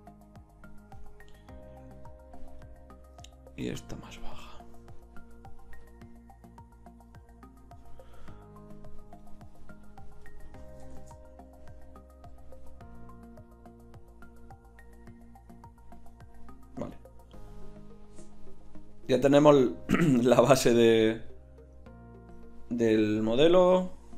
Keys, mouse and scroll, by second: 1.5-4.6 drag, 5.0-8.1 drag, 12.2 shift+z.